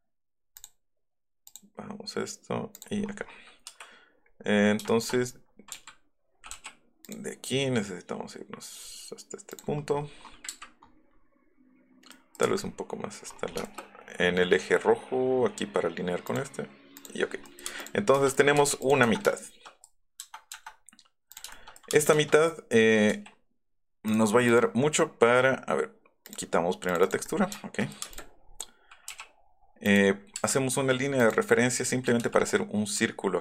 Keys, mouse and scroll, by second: 0.5 click, 1.4 click, 3.6 Escape, 6.5 l, 7.0 click, 10.6 Up, 12.3 Right, 12.5 click, 13.0 click, 13.2 click, 13.5 shift+click, 16.2 click, 16.9 click, 17.1 middle click, 18.1 shift+middle click, 18.5 m, 19.3 shift+middle click, 21.3 click, 22.0 space, 22.4 middle click, 23.2 b, 24.1 click, 24.4 click, 26.2 click, 26.8 click, 28.1 click, 28.4 scroll up 2, 29.8 click, 31.1 right click, 31.3 click.